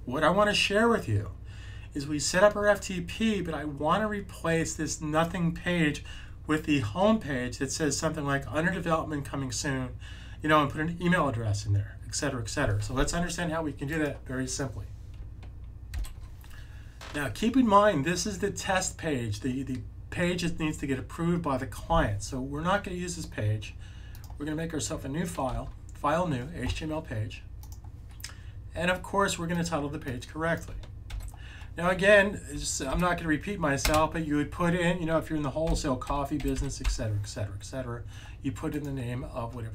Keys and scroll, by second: 25.4 super+n, 31.0 super+v, 35.6-36.7 typing, 38.8-39.6 typing.